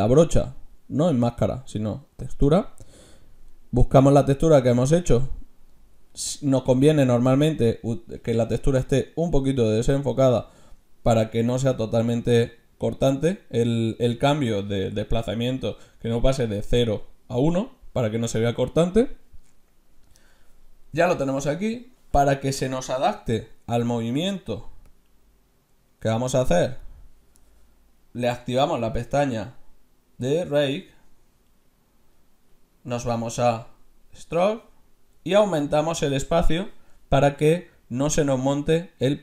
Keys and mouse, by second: 0.6-2.3 drag, 23.2 f, 24.9-26.8 drag, 31.0 middle click.